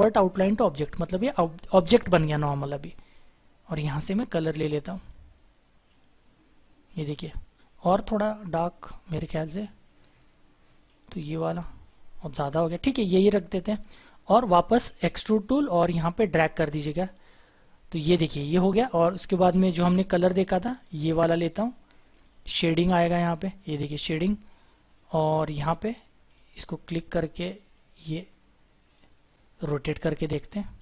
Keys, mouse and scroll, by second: 1.3-2.1 scroll up 1, 2.1-6.2 scroll down 1, 12.7 ctrl+z, 13.6 scroll up 1, 14.1-15.8 scroll down 1, 15.8-17.0 scroll up 1, 25.1-27.7 scroll down 1.